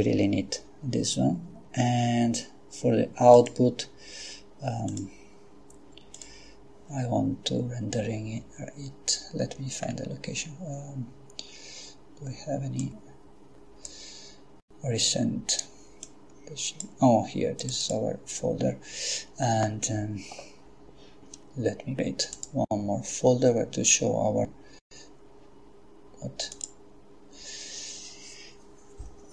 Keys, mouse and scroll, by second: 3.3 click, 4.9 click, 6.2 click, 9.8-10.4 scroll down 1, 12.8-14.5 drag, 16.0 click, 17.6 click, 22.4 click, 26.5 click.